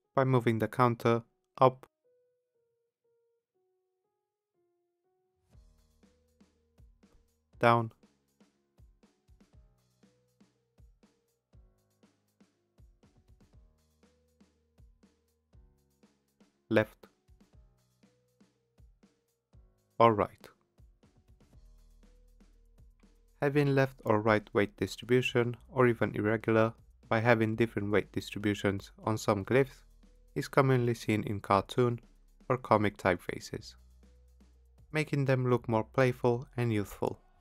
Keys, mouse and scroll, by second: 0.5 click, 3.3 click, 5.0 shift+Up, 5.3 shift+Up, 5.5 shift+Up, 6.7 click, 8.3 click, 9.6 shift+Down, 9.9 shift+Down, 10.2 shift+Down, 10.5 shift+Down, 10.9 shift+Down, 11.3 shift+Down, 12.1 click, 15.2 click, 16.8 shift+Left, 18.3 shift+Left, 18.6 shift+Left, 21.2 shift+Right, 21.5 shift+Right, 21.8 shift+Right, 22.2 shift+Right, 22.5 shift+Right, 23.7 click.